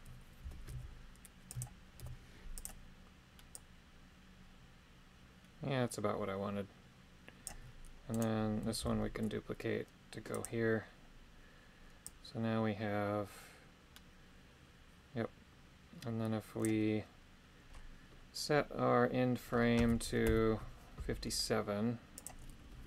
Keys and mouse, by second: 0.4 g, 0.7 y, 1.5 click, 2.0 i, 3.5-7.4 drag, 8.1 right click, 8.8 shift+d, 10.3 click, 12.1-16.6 drag, 20.1 Left, 20.3 Left, 22.2-22.8 drag.